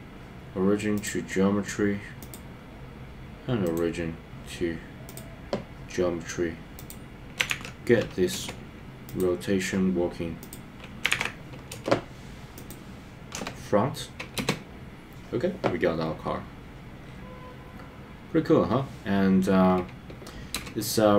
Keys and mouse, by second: 2.2 click, 3.6-5.2 right drag, 6.9-8.5 drag, 10.5-11.7 drag, 13.3 KP_0, 14.3 space, 20.5 space.